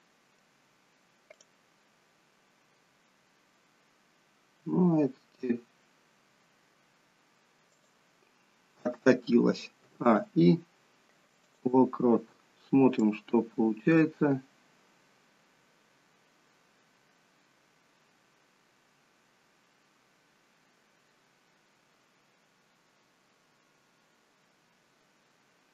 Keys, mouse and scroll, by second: 1.3 click, 4.5 g, 9.8 a, 10.0 i, 13.0 click.